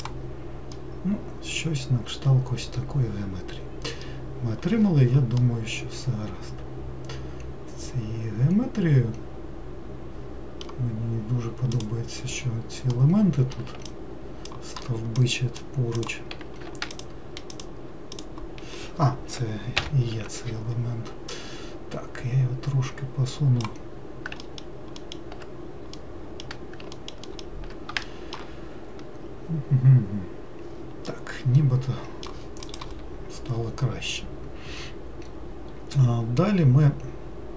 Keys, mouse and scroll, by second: 1.0-4.0 middle drag, 5.7-8.7 middle drag, 12.0 click, 13.2 middle click, 14.2-15.5 ctrl+drag, 16.2 ctrl+click, 17.2 shift+click, 17.8 shift+click, 18.4 shift+click, 20.1 ctrl+l, 21.6 click, 24.7 alt+middle click, 25.3 alt+middle click, 26.2-27.2 middle drag, 27.5 alt+middle click, 28.3 shift+middle click, 28.8-31.3 scroll down 5, 31.3-34.4 middle drag.